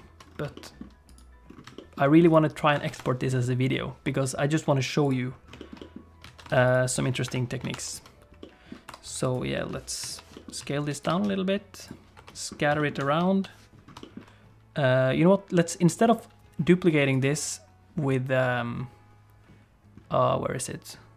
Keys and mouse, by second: 0.5 shift+click, 0.7 middle click, 1.1 click, 1.8 shift+middle click, 2.9 ctrl+s, 5.0 click, 5.6 shift+middle click, 5.8 middle click, 6.3 alt+a, 6.5 ctrl+s, 6.7 click, 7.2 KP_7, 7.7 alt+r, 8.4 middle click, 8.9 r, 9.5 click, 10.0 ., 10.3 middle click, 10.6 s, 11.0 g, 12.2 KP_7, 12.8 shift+click, 13.2 ., 14.0 shift+click, 17.1-21.1 drag.